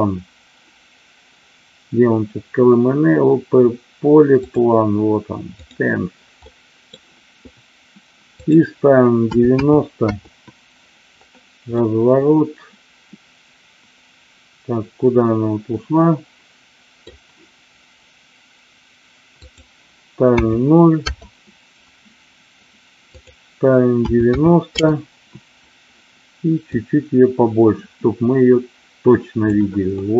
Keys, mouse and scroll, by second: 5.6 click, 6.6-6.9 middle drag, 8.3-10.3 drag, 11.7-17.1 middle drag, 19.3-21.3 drag, 23.1-25.2 drag, 26.5-29.4 drag, 29.9-30.1 middle drag.